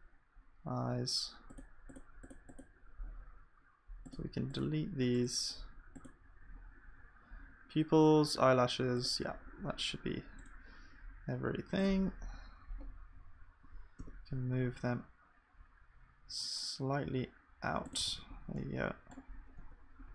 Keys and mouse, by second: 1.5-2.8 drag, 11.9-20.1 middle drag.